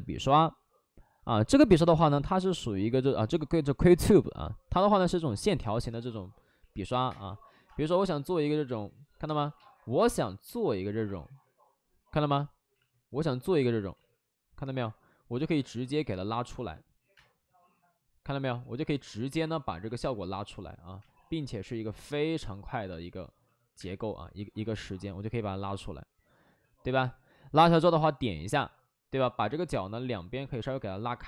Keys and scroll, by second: 6.5 ctrl+z, 6.7 x, 7.0 space, 7.6 space, 9.9 ctrl+z, 9.9 space, 12.7 ctrl+z, 13.9 ctrl+z, 15.3 ctrl+z, 17.1 space, 20.9 space, 23.7 space, 28.4 w.